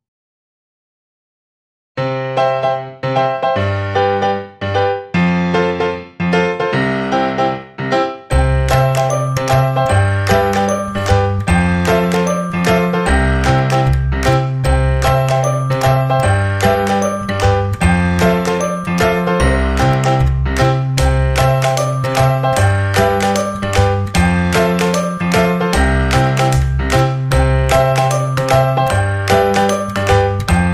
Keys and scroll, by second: 3.5 ctrl+=, 21.8 shift+s, 25.2 shift+m, 25.5 shift+a.